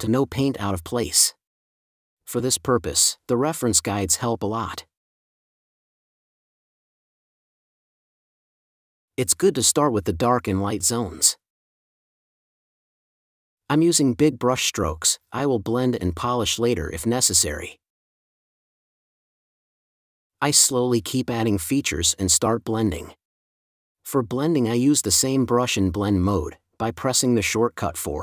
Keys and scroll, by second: 10.8 space, 14.0 space.